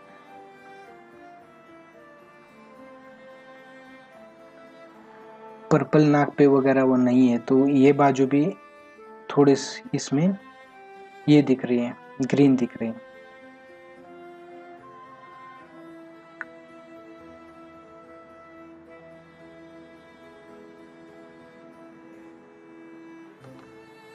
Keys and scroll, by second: 23.5 ctrl+alt+z.